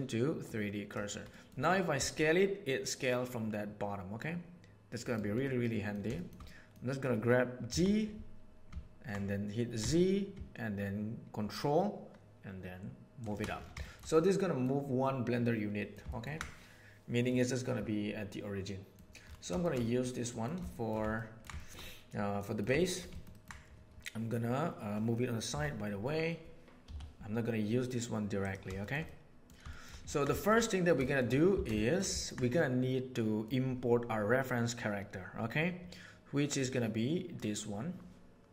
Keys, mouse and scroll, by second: 1.3 middle click, 1.9 s, 5.4-6.0 middle drag, 6.2 shift+middle click, 7.6 g, 13.8 shift+middle click, 14.0 middle click, 15.4-16.0 middle drag, 16.0 ctrl+middle click, 17.2-18.9 middle drag, 20.3 middle click, 20.6 shift+middle click, 21.1-21.5 ctrl+middle drag, 21.5 shift+middle click, 21.9-22.5 middle drag, 22.8 shift+middle click, 23.1 ctrl+middle click, 25.4 g, 28.8 shift+middle click, 29.0-29.4 middle drag, 29.7 shift+middle click, 30.0 ctrl+middle click, 30.3 shift+middle click, 30.6 middle click, 31.0 shift+middle click, 31.5 alt+a, 31.8 shift+middle click, 32.1 ctrl+middle click, 32.5-33.4 middle drag.